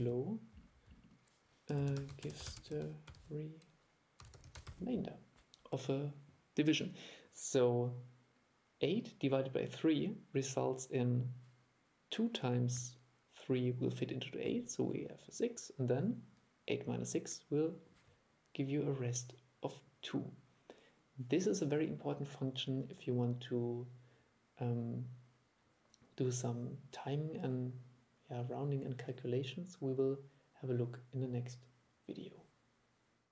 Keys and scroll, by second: 0.0 super+5.